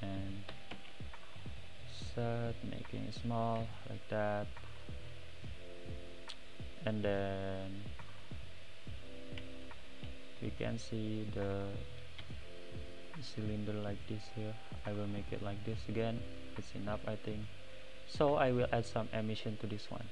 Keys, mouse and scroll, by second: 0.5 s, 3.6 click, 4.7 click, 6.9 click, 7.6 click, 9.6 shift+click, 10.4 `, 11.0 scroll down 3, 12.2 r, 15.4 click, 16.0-16.6 drag, 18.7 click.